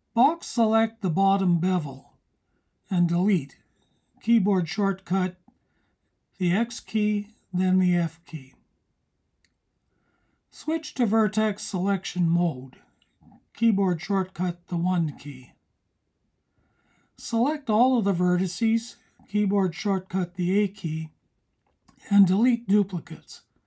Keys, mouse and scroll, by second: 2.2 x, 13.5 click, 16.3 a.